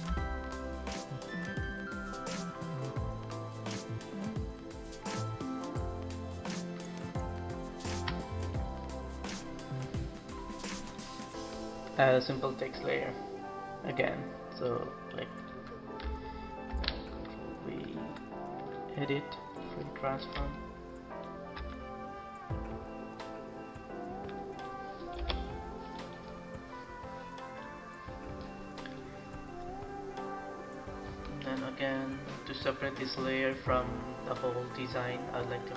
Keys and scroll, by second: 11.9 ctrl+c, 16.7 ctrl+v, 25.0 Return.